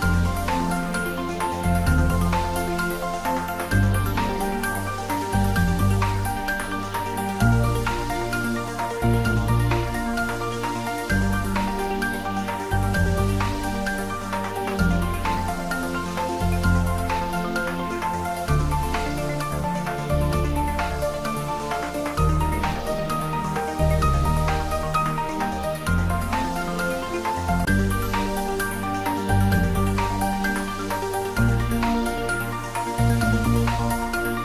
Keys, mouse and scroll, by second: 0.3-4.3 drag, 4.3 shift+d, 4.6 r, 8.2 click, 8.6 scroll down 1, 9.0 middle click, 10.0 shift+z, 10.6 middle click, 11.3 click, 11.9 scroll up 1, 16.5 scroll up 1, 18.1 scroll down 1, 18.6-21.0 middle drag, 21.0 scroll down 1, 22.1-22.5 scroll up 1, 30.4 scroll up 1, 30.6 ctrl+z, 32.2 ctrl+z, 33.0 ctrl+z, 33.6 ctrl+z.